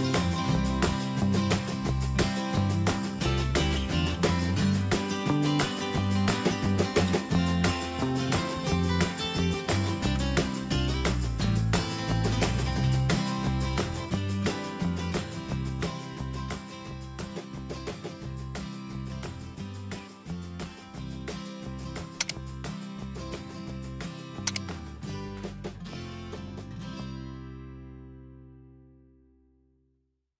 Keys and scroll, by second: 4.1 ctrl+t, 7.9 Return.